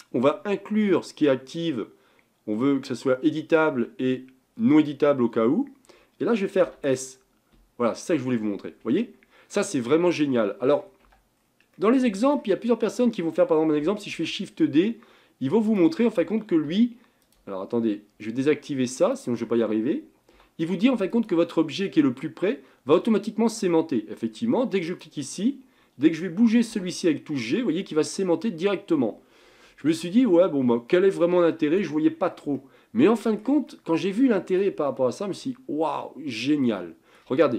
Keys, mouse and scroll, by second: 6.7 s, 9.5-11.1 middle drag, 11.1 Tab, 11.5 scroll down 3, 11.8-12.8 middle drag, 12.8 click, 14.2 shift+d, 16.7 g, 19.2 click, 20.4 g, 25.0 click, 26.8 g, 30.3-33.7 middle drag, 33.7 scroll up 1, 33.9-35.6 middle drag, 35.6-36.5 scroll up 5, 36.5 scroll down 2, 36.9 shift+middle click.